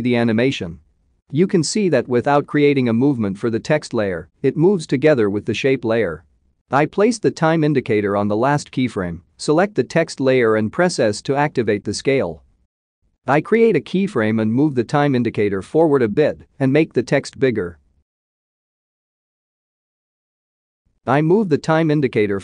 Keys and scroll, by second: 11.1 s.